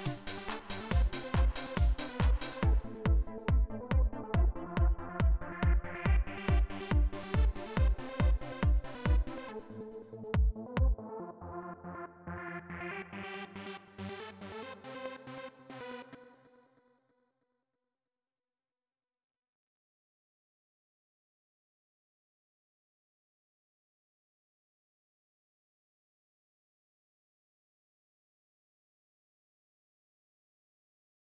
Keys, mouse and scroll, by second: 0.8 right click, 1.5 click, 2.2 right click, 9.5 click, 14.4 right click, 15.9 space, 17.2 click, 19.5-21.9 typing, 26.3 click, 27.8 click, 28.7 Return.